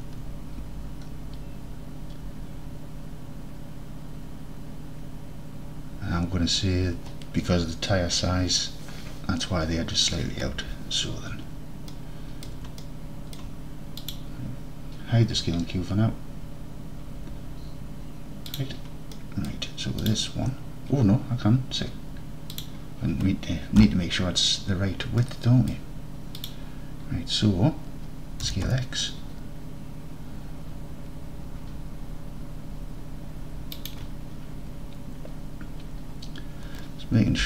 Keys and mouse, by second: 12.0 alt+middle click, 12.5 alt+middle drag, 12.8-13.4 alt+middle drag, 14.0 click, 18.6 click, 19.4 middle drag, 20.1 click, 22.6-23.8 drag, 23.8 KP_7, 25.4-25.8 drag, 26.5-26.9 drag, 28.6 s, 28.8 x, 33.8 shift+click.